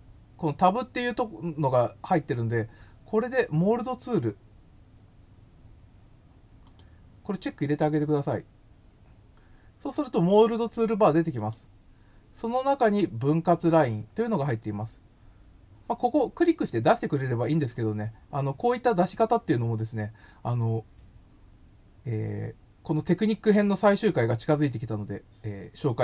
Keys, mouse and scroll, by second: 6.6 click, 11.3 click.